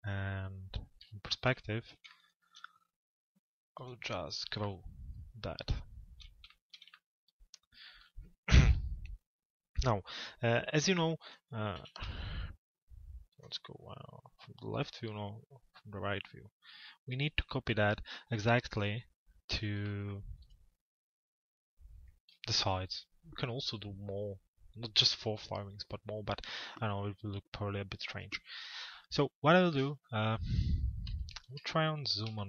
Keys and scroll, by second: 11.4 f, 12.0 z, 13.4 l.